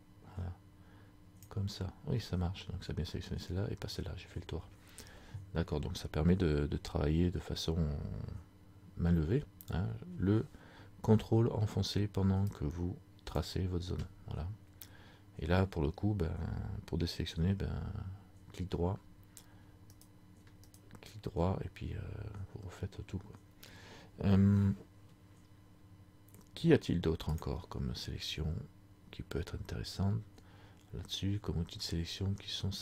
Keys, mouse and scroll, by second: 12.6 ctrl+click, 20.1 ctrl+right click, 21.0 right click, 27.4 click.